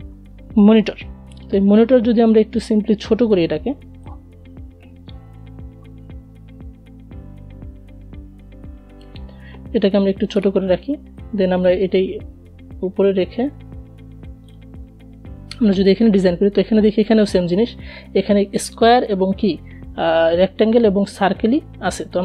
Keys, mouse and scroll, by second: 0.9-6.9 drag, 6.9-9.4 shift+drag, 9.4 space, 9.5 click, 9.8 space, 11.3-14.9 drag, 21.8-22.2 drag.